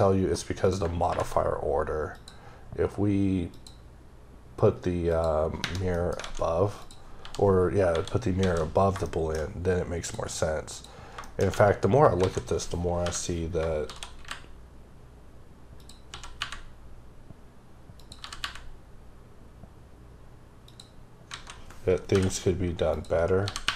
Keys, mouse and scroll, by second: 0.7 click, 2.1 click, 3.6 click, 5.1 click, 6.0 middle click, 6.2 alt+a, 6.8 click, 7.2 h, 7.9 KP_7, 8.4 alt+a, 8.8 scroll down 2, 9.1 shift+middle click, 10.0 click, 10.7 click, 11.3 shift+middle click, 11.5 scroll up 1, 12.2 alt+a, 15.8 click, 16.1 s, 18.0 click, 18.2 g, 20.6 typing, 21.4 alt+a, 22.9 click, 23.5 g.